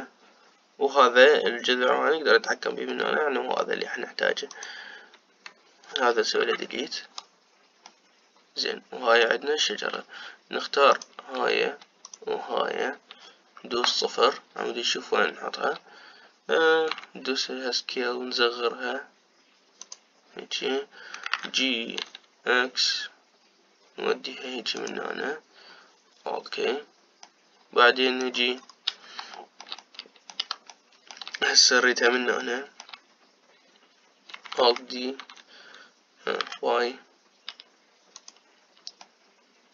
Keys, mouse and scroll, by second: 3.7-5.2 middle drag, 5.2 click, 7.4 Delete, 8.6-11.6 middle drag, 11.6 click, 12.8 shift+click, 14.4 KP_0, 17.8 s, 22.1 g, 28.0-29.3 middle drag, 29.3-30.0 scroll down 4, 30.0-35.6 shift+middle drag, 35.6 alt+d.